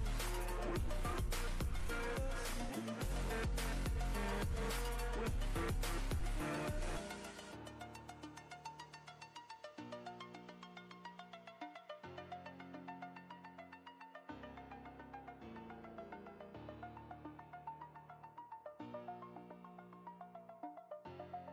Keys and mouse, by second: 0.1-1.4 drag, 9.5 ctrl+space, 9.7-10.6 ctrl+click, 10.0 ctrl+space, 13.4 click, 13.4 click, 21.2 right click.